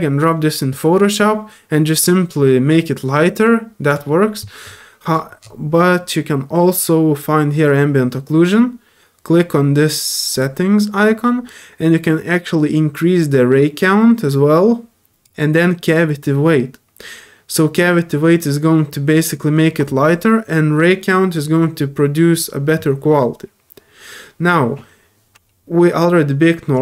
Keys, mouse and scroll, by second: 3.9 click, 5.4 middle click, 10.3 click, 12.7-15.2 drag, 16.2-19.1 drag, 26.7 click.